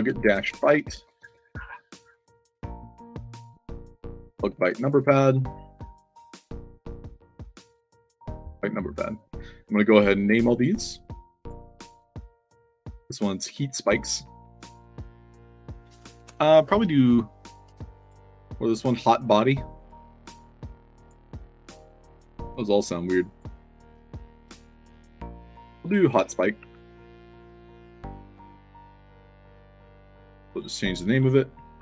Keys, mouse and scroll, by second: 0.0-1.0 typing, 1.2 ctrl+c, 1.6 click, 2.3 click, 3.1 click, 3.3 ctrl+v, 3.8 space, 4.2 shift+p, 4.6 ctrl+a, 4.9 ctrl+c, 5.5 drag, 6.2 click, 6.8 click, 7.5 click, 7.7 ctrl+v, 8.9 c, 9.6 click, 10.2 d, 10.6 s, 11.3 click, 12.0 scroll down 1, 12.9 scroll down 1, 13.8 click, 17.9 click, 19.7 click, 23.2 click, 23.4 click, 24.8 o, 26.5 ctrl+a, 26.8 ctrl+c, 29.9 click, 30.4 click.